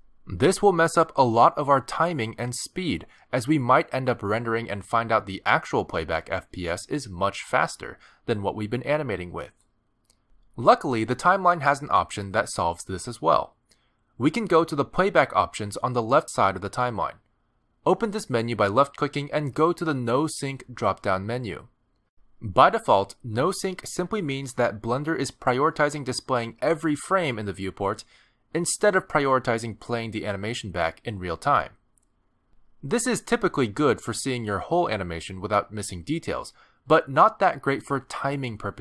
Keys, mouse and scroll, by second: 4.5 middle click, 5.9 middle click, 10.4 click, 13.2 click, 17.6 click.